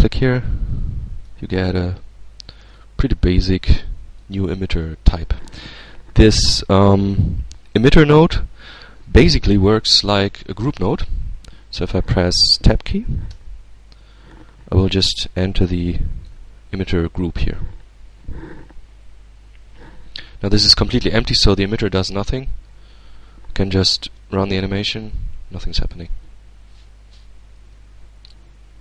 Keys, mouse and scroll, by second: 0.2-1.3 drag, 1.3-1.9 scroll up 1, 1.9 scroll up 1, 2.6-3.9 drag, 4.0-5.4 drag, 13.1 Tab, 14.1 middle click, 14.2-16.5 drag, 21.7 Tab, 23.8 alt+a, 25.5-25.9 scroll up 2, 25.9 alt+a, 27.4 z.